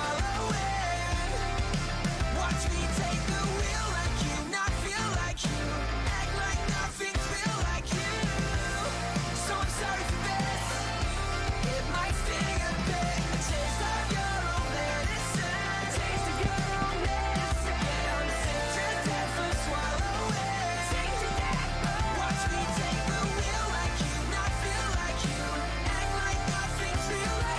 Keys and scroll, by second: 15.7 w, 16.4 a, 20.9 d, 21.6 Escape, 22.3-24.1 typing.